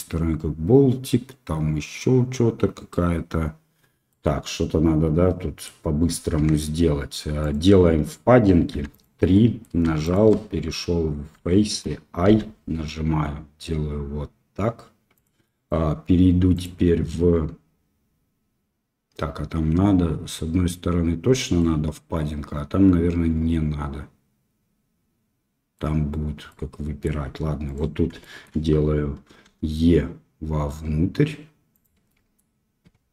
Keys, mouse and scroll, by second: 4.0-5.6 middle drag, 6.3 Tab, 7.4-8.7 drag, 8.7 3, 8.9 click, 9.3 middle click, 11.4 shift+middle click, 12.4 i, 15.4 middle click, 16.5-21.3 drag, 21.5-25.7 middle drag, 26.4 middle click, 27.6 click, 28.1 shift+middle click, 29.5 e, 32.0 middle click.